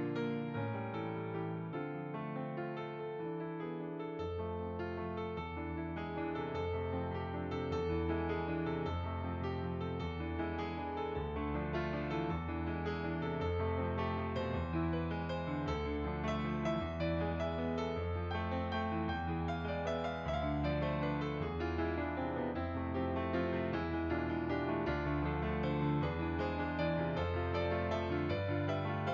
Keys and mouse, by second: 0.1 ctrl+z, 0.4 click, 1.6 s, 2.1 click, 2.6 ctrl+z, 2.9 click, 3.7 s, 4.3 click, 8.3 s, 9.4 click, 10.5 click, 11.1 middle click, 13.1 click, 17.2 click, 24.8 click, 27.5 middle click.